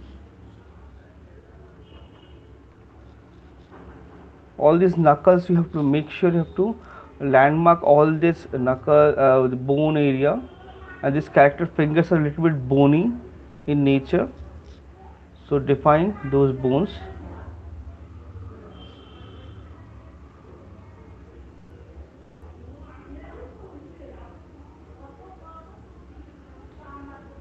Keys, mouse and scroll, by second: 1.7-3.1 typing, 4.7 ], 4.9 ], 7.0 click, 7.6 click, 8.2 ], 9.4 ], 9.4 click, 10.5 click, 10.9 click, 11.2 click, 11.7 click, 12.3 click, 13.5 click, 13.7 click, 14.5 click, 15.1 click, 15.7 click, 16.7 click, 16.9 click, 17.4 click, 17.8 click, 18.0 click, 18.2 click, 19.1 click, 20.5 click, 21.3 click, 22.3 click, 22.7 click, 23.3 click, 24.5 click, 25.2 click, 26.0 click, 26.2 click, 27.0 click.